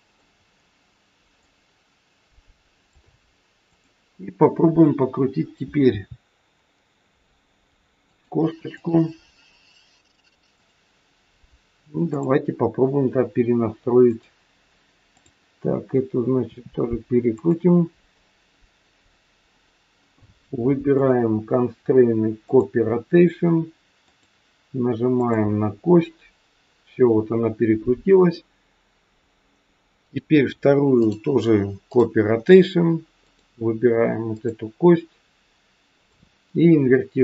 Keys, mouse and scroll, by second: 0.3 scroll up 2, 1.4 click, 3.7 click, 4.2-4.8 scroll down 3, 4.8-5.8 scroll up 1, 5.8 r, 8.7 click, 10.5 click, 12.1 click, 14.1 click, 15.2 click, 16.4 r, 20.9 click, 24.1 click, 29.2-29.9 scroll down 2, 29.9 click, 30.9 click, 33.3 click, 35.9 click.